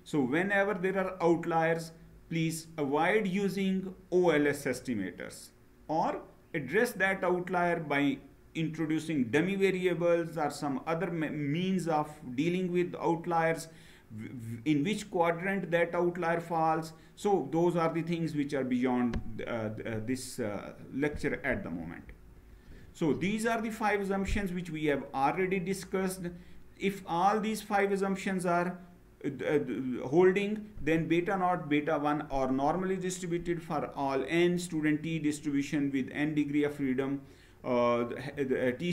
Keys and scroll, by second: 21.7 Down.